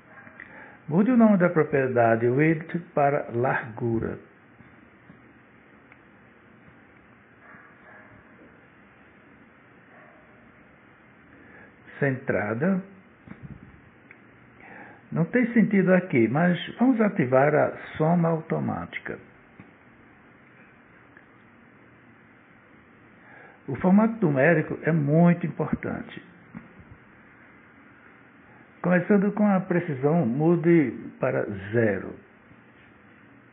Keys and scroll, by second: 6.0 shift+l, 6.3 a, 9.1 Return.